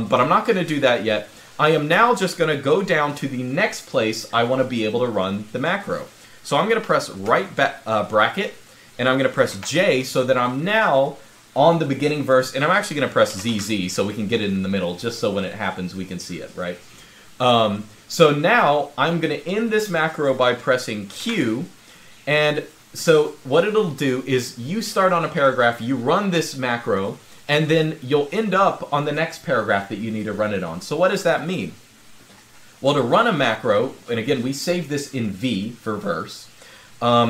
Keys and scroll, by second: 7.0 }, 10.7 j, 13.1 z, 20.9 g.